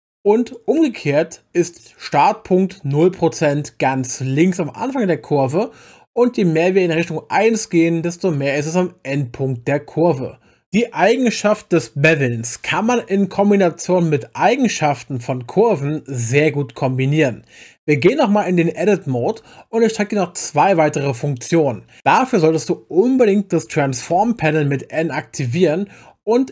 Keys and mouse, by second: 7.0-10.6 drag, 19.2 Tab, 24.1 n.